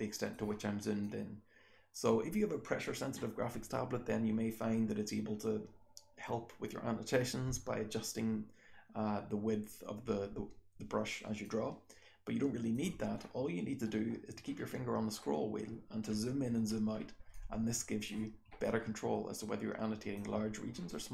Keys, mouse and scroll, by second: 0.2-1.8 scroll up 1, 1.0 click, 1.8-3.2 scroll up 1, 3.2-7.2 scroll up 1, 7.2-8.6 scroll up 1, 8.6-9.9 scroll up 1, 9.9-11.4 scroll up 1, 11.4-12.7 drag, 11.4-12.7 scroll up 1, 12.7-13.0 scroll up 1, 13.0-13.9 scroll down 1, 13.9-14.3 scroll down 1, 14.3-14.8 scroll up 2, 14.8-15.9 scroll down 2, 15.9-16.4 scroll up 1, 16.4 scroll down 1, 16.6-17.8 scroll up 1, 17.8 click, 17.9-18.6 scroll up 1, 18.6 click, 18.6-19.2 scroll up 1, 19.2-20.1 scroll up 1, 20.1-21.1 scroll up 1.